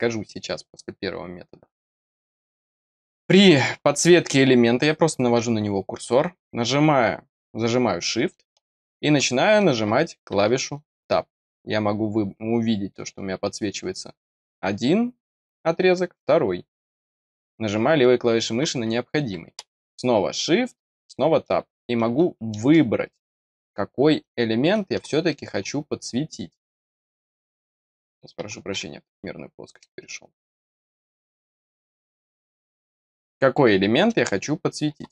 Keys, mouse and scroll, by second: 9.5 shift+Tab, 17.2 click, 22.9 middle click, 23.2 scroll down 1, 23.4 middle click, 25.2 click, 27.1-27.5 scroll down 2, 29.3 middle click, 31.3-31.9 scroll down 3, 32.1 scroll up 1.